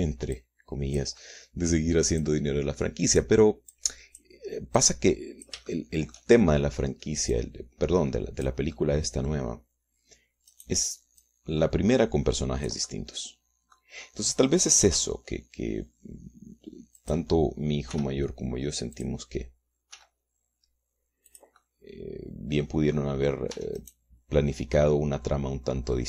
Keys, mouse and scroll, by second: 1.5 click, 2.3 middle click, 3.3-4.5 drag, 4.9 click, 5.9 click, 6.9 shift+middle click, 8.5-9.8 drag, 9.9 middle click, 11.7 click, 12.4-14.7 drag, 14.7-16.5 middle drag, 16.1 g, 18.1 click, 19.1 r, 20.1 click, 21.1 g, 22.5 click, 24.7 Tab, 25.0 right click, 25.9-26.0 middle drag.